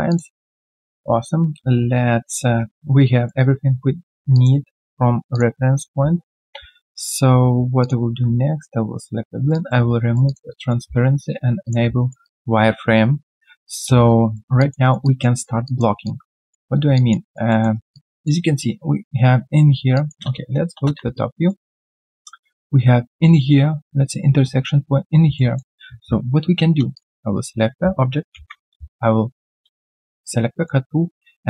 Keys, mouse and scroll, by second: 0.4 alt+middle click, 0.8 alt+click, 2.5 right click, 5.8 scroll down 1, 6.5 ctrl+a, 7.3 ctrl+a, 9.9 alt+right click, 12.0 alt+right click, 12.2 alt+click, 13.5 alt+middle click, 13.9 alt+q, 14.0 right click, 14.5 alt+click, 14.8 alt+right click, 15.0 alt+click, 15.3 alt+right click, 15.6 alt+click, 16.9 alt+click, 17.2 alt+right click, 17.5 alt+middle click, 17.7 alt+right click, 17.9 alt+click, 20.2 space, 20.7 space, 21.1 alt+right click, 21.6 alt+middle click, 25.3 alt+middle click, 30.6 alt+middle click.